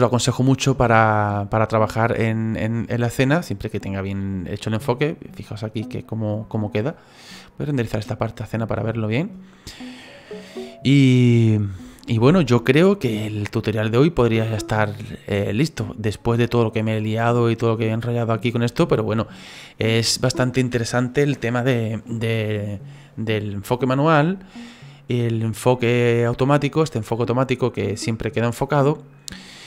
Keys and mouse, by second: 0.2 click, 1.3 click, 3.4 click, 6.1 click, 7.8 click, 8.2 click, 27.5 click, 28.1 click.